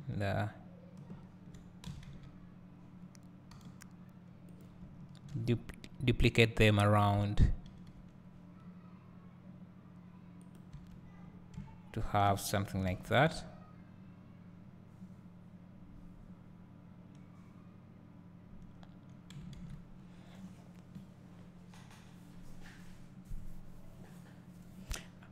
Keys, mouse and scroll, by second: 2.1 s, 4.7 click, 5.4 shift+d, 7.4 click, 7.8 shift+d, 10.6 click, 11.2-11.8 scroll down 2, 12.4-13.5 scroll down 1, 13.7 `.